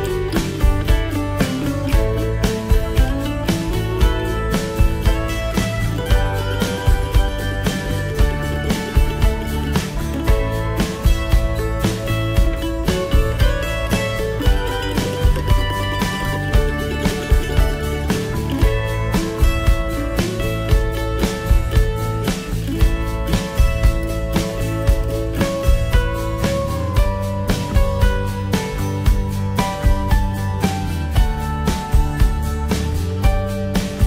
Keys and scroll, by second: 2.0 ctrl+j.